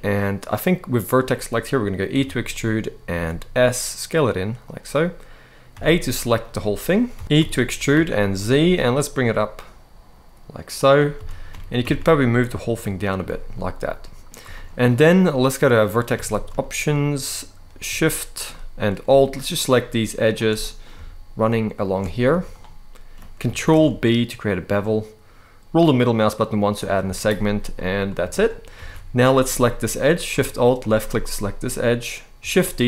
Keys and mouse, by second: 1.8 e, 2.8 s, 4.3 click, 5.5 w, 6.2 right click, 6.8 a, 7.2 e, 7.6 z, 8.3 z, 10.5 click, 10.9 a, 11.2 g, 11.5 z, 12.8 click, 13.2 middle click, 14.3 shift+middle click, 15.9 alt+a, 16.3 shift+middle click, 18.2 shift+middle click, 19.2 alt+shift+click, 19.9 alt+shift+click, 20.3 middle click, 21.5 alt+shift+click, 22.0 z, 23.5 ctrl+b, 26.5 click, 26.7 z, 27.4 middle click, 28.0 shift+middle click, 28.4 alt+a, 30.5 alt+shift+click, 32.3 shift+d.